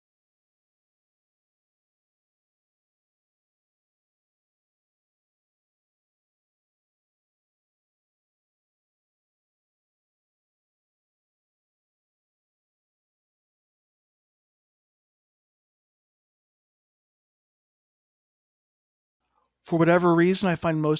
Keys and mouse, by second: 1.8-3.8 middle drag, 4.7-6.4 middle drag, 9.8-13.7 middle drag, 14.7 F3, 15.5 o, 17.3-18.5 drag, 18.9-19.9 drag, 19.9-20.9 middle drag.